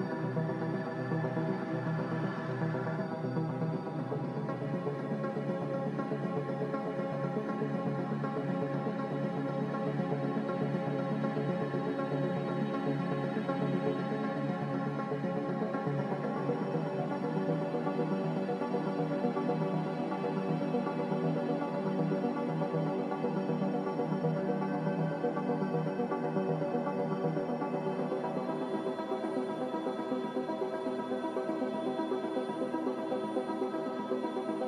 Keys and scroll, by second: 1.1 z, 4.9 g, 9.5 Escape, 9.7 Escape, 10.3 ctrl+z, 12.6 x, 18.8 z, 23.2 z, 24.7 x, 27.5 typing, 27.7 Return, 29.1 z, 31.2 typing, 31.4 Return, 33.4-34.4 typing, 33.6 Return.